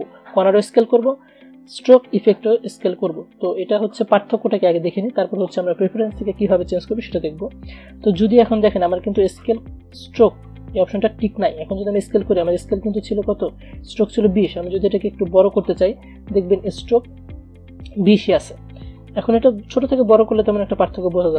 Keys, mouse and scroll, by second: 3.9-8.1 drag, 14.6 shift+Num_Lock, 14.6 click, 14.7-21.3 shift+drag.